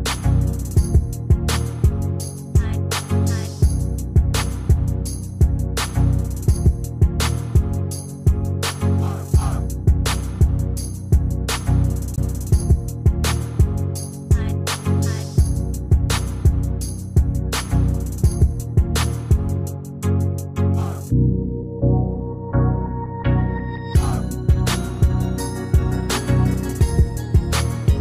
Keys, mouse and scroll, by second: 11.2 Escape, 13.6 Down, 13.8 Down, 19.8 Escape, 21.0 Down.